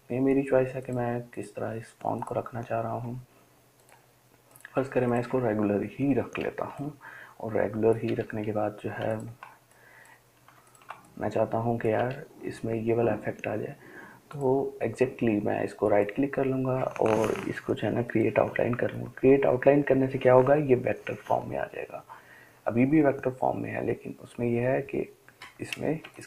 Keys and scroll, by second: 7.4-8.5 scroll, 9.3-10.1 ctrl+space, 9.3 scroll, 10.3 ctrl+space, 10.4 ctrl+space, 10.5 ctrl+space, 10.7 ctrl+space.